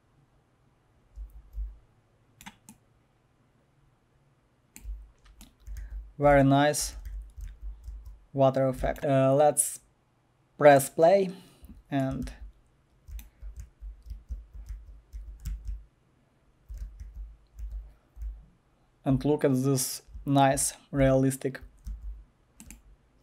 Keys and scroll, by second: 0.6 typing, 5.4-8.8 typing, 11.9-23.2 typing.